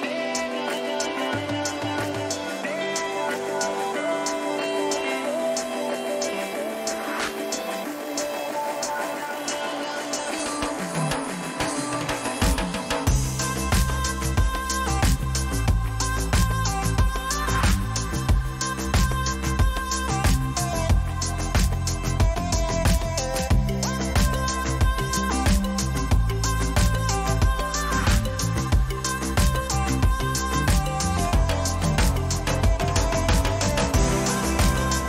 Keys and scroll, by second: 26.7 space.